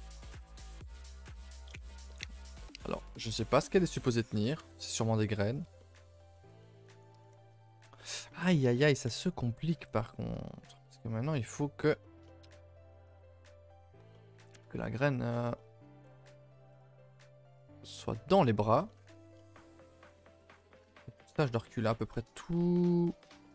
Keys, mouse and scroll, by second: 0.5 alt+h, 0.7 scroll up 1, 0.9 a, 1.0 a, 1.4 click, 1.7-2.3 middle drag, 2.3-2.6 scroll up 1, 2.6 middle click, 3.0 g, 5.8-7.0 middle drag, 7.0 scroll up 2, 7.3-8.8 shift+middle drag, 8.8 g, 11.5-14.6 middle drag, 14.6 KP_0, 15.6 shift+middle drag, 15.9-16.8 scroll up 2, 16.8 z, 17.7 z, 18.0 middle click, 18.5-19.4 scroll up 7, 18.9 shift+middle drag, 19.4-20.8 middle drag, 20.8 click, 20.9 Tab, 21.5 middle click, 21.8 a, 21.9 a, 22.1 2, 22.5 alt+Left, 23.1 alt+shift+Left, 23.4 middle click.